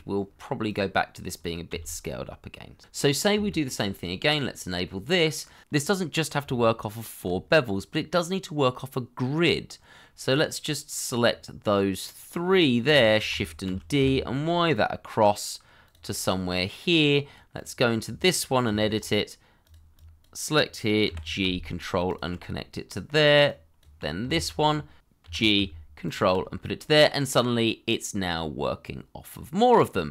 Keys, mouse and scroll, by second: 0.2 double click, 0.7 Tab, 1.0 g, 1.2 ctrl+click, 1.6 alt+q, 1.7 g, 2.5 g, 2.7 ctrl+click, 2.8 middle click, 3.4 shift+middle click, 4.8 middle click, 9.0 Tab, 9.8 middle click, 12.2 scroll down 1, 12.4 middle click, 12.9 shift+middle click, 13.6 shift+d, 13.9 y, 16.0 middle click, 18.6 Tab, 19.9 double click, 21.0 g, 22.0 ctrl+click, 22.8 middle click, 24.3 alt+q, 25.0 middle click, 25.2 g, 26.0 ctrl+click, 26.6 middle click.